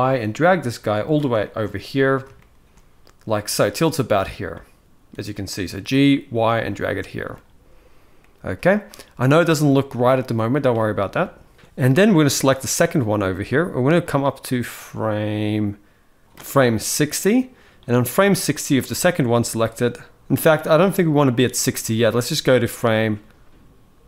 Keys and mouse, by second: 1.1 shift+middle drag, 1.4-2.0 middle drag, 2.1-2.5 shift+middle drag, 4.3-5.5 middle drag, 6.7-7.0 shift+middle drag, 7.9-8.2 middle drag, 8.5 shift+middle drag, 10.5-10.9 shift+middle drag, 12.3 click, 13.7-16.2 drag, 16.9 middle click, 22.2-24.0 drag.